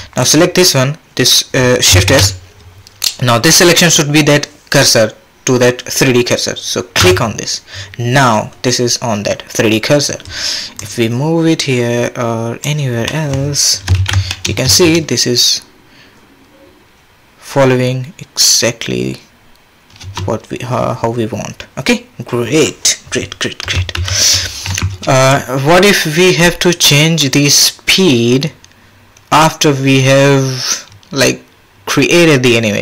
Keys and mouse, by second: 2.1 shift+s, 10.8-13.3 drag, 13.9 shift+Left, 14.3 drag, 14.6 space, 20.0 space, 24.0 shift+Left, 25.3-32.8 drag.